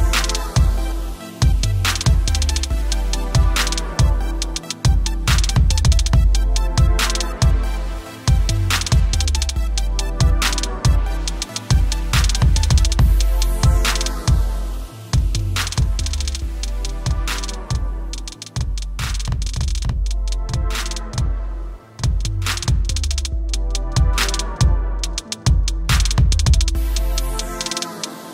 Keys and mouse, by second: 9.0 click, 10.1 right click, 11.5 click, 12.6 a, 13.7 Tab, 13.7 click, 17.5 right click, 18.4 click, 19.8 click, 20.9 click, 22.4 KP_Enter, 23.0 t, 24.5 click, 25.3 Return, 25.4-28.1 typing, 26.0 click, 26.8 alt+click, 27.5 Return.